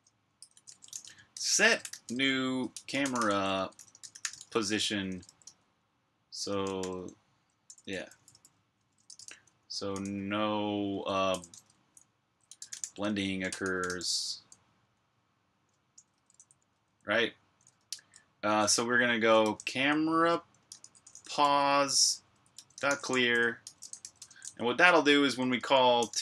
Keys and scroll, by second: 0.0-4.2 typing, 5.6-14.3 typing, 15.8 Return, 16.0 Return, 16.6-17.4 typing, 18.5-26.2 typing.